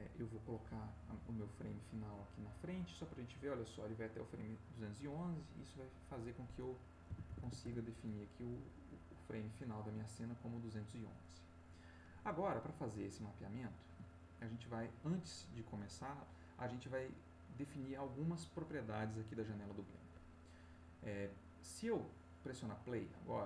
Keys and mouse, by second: 0.4-2.1 drag, 5.8 click, 7.0 2, 7.2 1, 7.6 Return, 12.7 click, 14.3 ctrl+click.